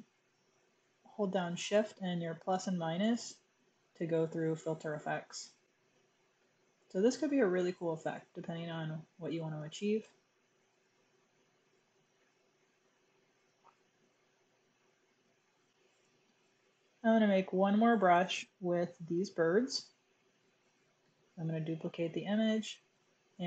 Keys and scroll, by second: 1.6 -, 4.4 -, 7.0-8.1 typing, 12.1-12.7 typing, 13.8-14.2 typing, 21.0 super+j.